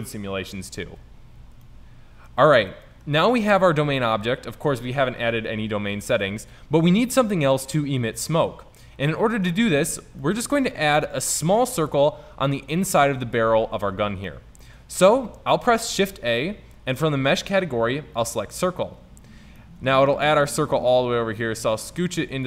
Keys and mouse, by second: 8.3-9.9 middle drag, 13.8-14.4 middle drag, 15.9 shift+a, 19.3-19.6 middle drag, 19.8 middle drag, 21.1-22.4 drag.